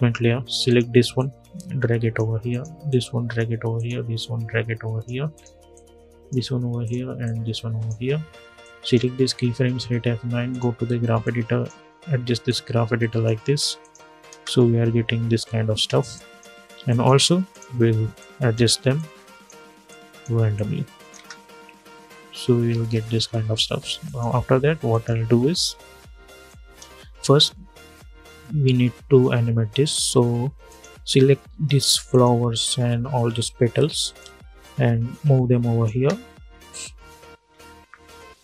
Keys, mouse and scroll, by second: 9.3 F9, 10.2-13.5 drag, 13.5 click, 14.0 space, 15.9-20.8 drag, 20.8 space, 23.8 click, 25.6 scroll up 1, 26.2 click, 26.7 scroll down 1, 30.4 click, 30.7 scroll up 1, 31.8 shift+click, 32.9 scroll down 1, 33.9-35.6 drag, 35.6 space, 37.8 scroll down 2.